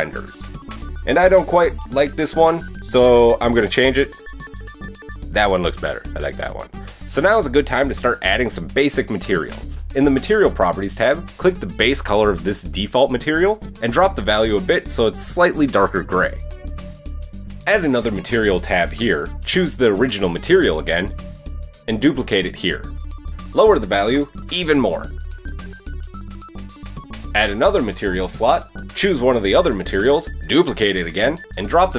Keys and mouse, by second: 1.1 click, 1.3-4.7 middle drag, 4.7-11.6 drag, 11.6-17.9 middle drag, 16.2 Tab, 16.4 Tab, 17.9-23.5 drag, 23.5-24.6 middle drag, 25.0-27.7 middle drag, 27.7-31.9 drag.